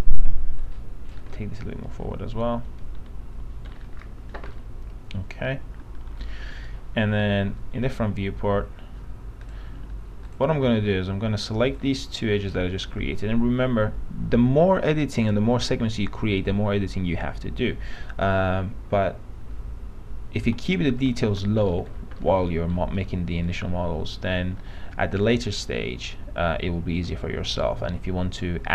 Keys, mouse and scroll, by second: 0.7 click, 1.5-3.9 alt+middle drag, 4.3-4.7 scroll down 1, 5.7 alt+middle click, 7.3 f, 9.6 click, 10.5 ctrl+click, 20.7 p, 21.4 z, 21.8 middle click, 22.0-22.3 scroll down 1, 22.3 alt+middle click, 23.3 middle click.